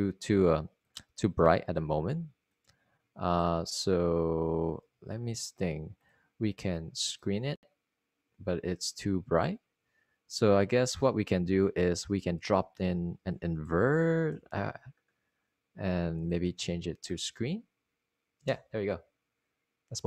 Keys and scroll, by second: 6.8 super+z, 12.4 super+z, 14.4 Tab, 14.9-16.2 typing.